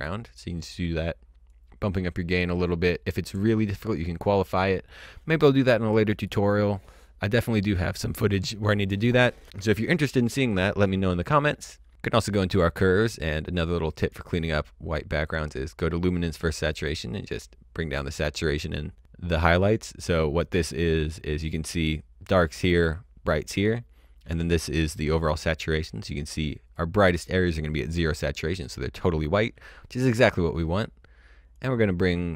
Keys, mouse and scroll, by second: 1.5 click, 11.9-12.3 scroll up 1, 12.3 click, 16.7 click, 26.7 click, 31.5 click.